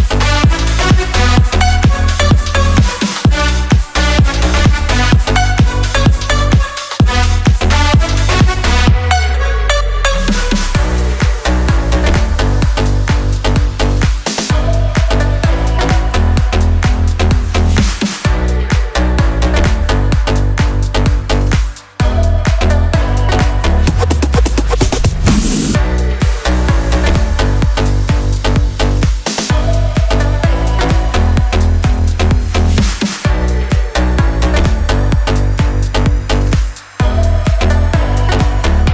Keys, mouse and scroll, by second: 0.1 shift+click, 2.2 click, 2.6 click, 3.5 click, 3.9 click, 5.4 click, 6.9 click, 7.5 click, 10.0 ctrl+shift+j, 10.5 ctrl+shift+s, 15.5 click, 16.5 click, 23.0 click, 26.5-28.3 drag, 32.6 click, 35.0-37.7 drag.